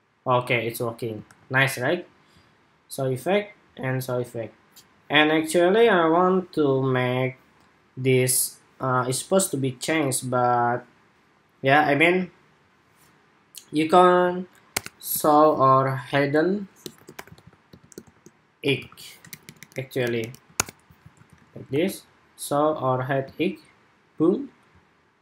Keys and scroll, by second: 1.0 super+r, 20.7 super+s, 21.1 super+Tab, 21.4 super+r.